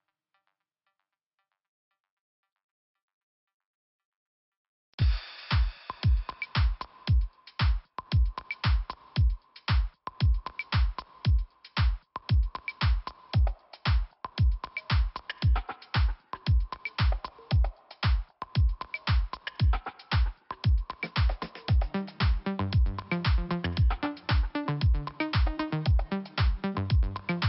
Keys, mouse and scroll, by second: 0.3 click, 1.5 click, 2.7 scroll up 2, 3.1 click, 4.4 click, 5.4 click, 7.4 click, 8.6-8.9 scroll down 1, 9.1 scroll up 1, 10.5-11.0 scroll up 1, 11.5 click, 13.2 click, 13.4 click, 14.6 click, 18.8 click, 19.4 scroll up 1, 20.0 click, 23.5 click, 25.5 click, 26.6 click.